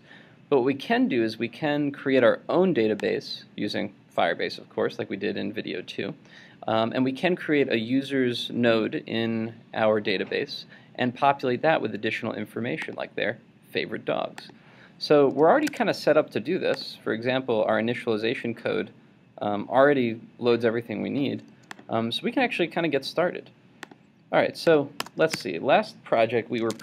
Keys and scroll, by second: 15.7 super+Tab, 25.3 super+Tab.